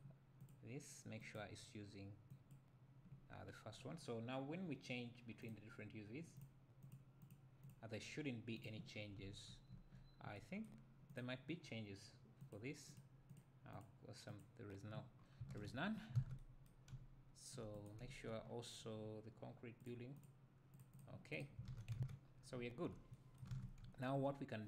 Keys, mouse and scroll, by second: 0.0-6.4 drag, 6.8-7.3 drag, 7.6 click, 8.6 click, 8.9 scroll down 1, 9.2 `, 11.2 click, 12.4 click, 12.9 click, 13.3 click, 13.7 click, 14.3 click, 15.1 scroll up 2, 15.9-16.2 scroll down 2, 16.2 alt+a, 16.9 `, 17.9 click, 18.4-18.9 scroll up 2, 18.9-19.8 scroll up 1, 19.8-20.4 drag, 20.7 click, 22.0 alt+q, 22.3 scroll down 1, 22.5 `, 23.5 ctrl+s, 23.8 `.